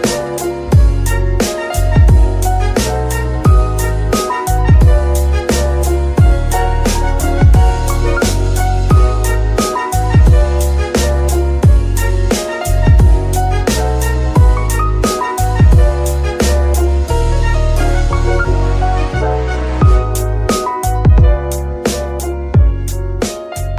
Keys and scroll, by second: 10.0 ctrl+Tab, 15.3 z, 17.3 g, 18.6 Escape, 19.4 g, 19.7 Escape, 21.2 shift+z, 22.1 z.